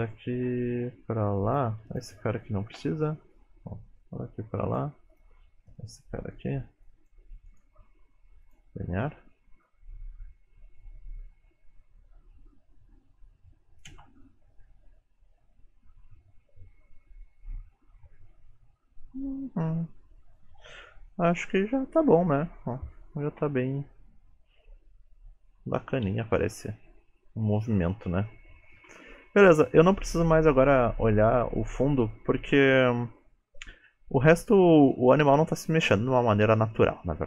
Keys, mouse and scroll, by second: 2.0 click, 2.8 Delete, 3.4 click, 5.2 click, 5.8 middle click, 6.5 middle click, 6.9 click, 7.5 right click, 9.8 click, 14.0 space, 19.9-22.9 scroll down 2, 28.8 space, 31.6 click, 32.3-34.2 scroll down 2, 32.7 middle click, 34.2 shift+middle click, 34.9 middle click.